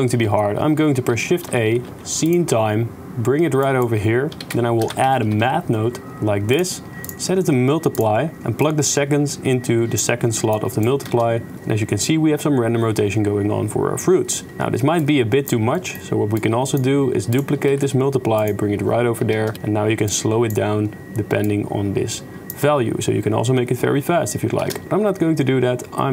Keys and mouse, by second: 1.1 shift+a, 4.4 shift+a, 7.2-8.0 drag, 8.6-10.0 drag, 10.5 click, 11.0 shift+space, 14.5 shift+space, 15.0 click, 15.8 click, 16.3 click, 17.7 shift+d, 19.4 shift+space, 20.1 shift+click, 21.5-22.5 shift+drag, 24.6 shift+space, 24.8-26.1 shift+drag.